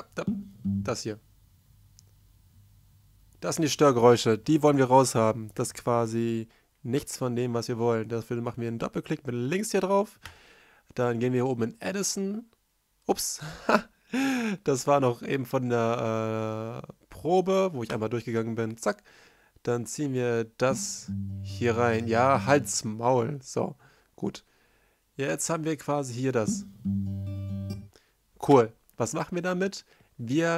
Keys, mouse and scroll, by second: 4.7 F1, 10.6 F1, 10.9 F1, 13.1 right drag, 18.1 space, 19.9 space, 22.1 c, 22.3 space, 23.1 F1, 23.1 right click, 23.1 r, 25.0 right drag, 26.3 space, 27.1 space, 28.6 r.